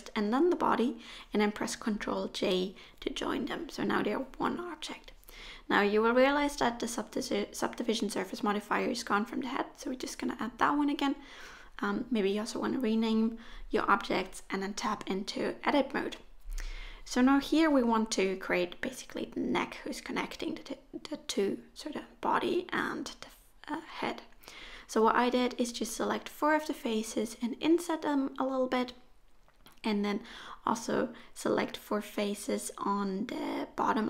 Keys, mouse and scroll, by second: 0.5 ctrl+j, 2.8 middle click, 4.3 click, 9.2 click, 9.4 click, 10.9 t, 13.9 Tab, 14.2 middle click, 15.3-16.5 scroll up 2, 15.7 middle click, 17.7 click, 18.3 shift+click, 18.7 click, 19.2 shift+click, 20.2 i, 22.1 e, 23.5 middle click, 24.8 ctrl+z, 25.1-25.5 scroll up 2, 25.5 middle click, 26.5 g, 27.5 middle click, 32.3-33.0 scroll down 2, 33.0 middle click.